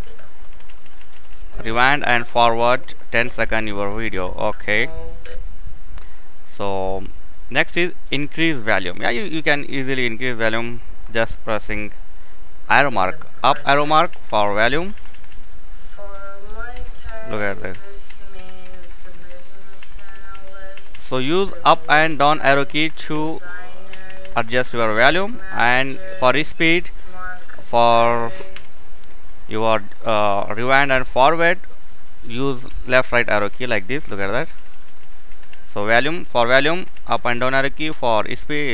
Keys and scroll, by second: 4.8 typing, 12.6 typing, 21.7 typing, 28.2 k.